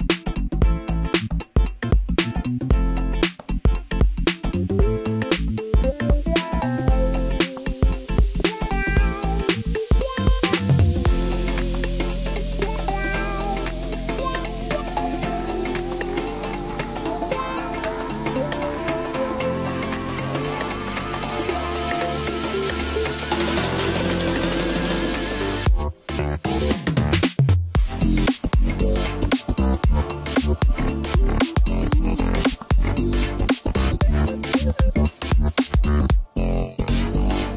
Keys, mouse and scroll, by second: 2.5-5.5 middle drag, 6.7 click, 7.3-10.3 middle drag, 10.3 Tab, 11.6-13.2 scroll up 3, 13.2 click, 13.4 click, 14.5 click, 14.6 click, 15.8 click, 16.0 click, 16.9 click, 18.0-19.5 scroll down 10, 19.5-20.7 middle drag, 20.7-22.0 scroll up 1, 22.0 shift+click, 23.4-26.4 middle drag, 26.4 shift+click, 27.2 middle click, 28.0-28.9 scroll up 6, 28.9 middle click, 29.6-30.9 scroll up 1, 30.9-33.9 drag, 34.6-37.5 middle drag.